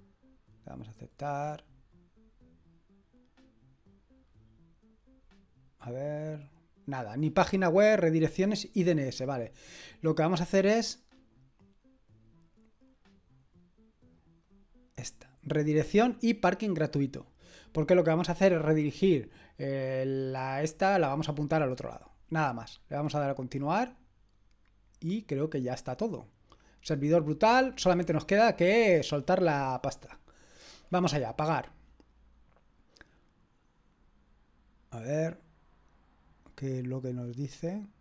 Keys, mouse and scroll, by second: 0.9 click, 1.5-7.9 scroll down 1, 7.9 click, 14.4 click, 23.1 click, 31.3 click, 37.7-38.0 drag.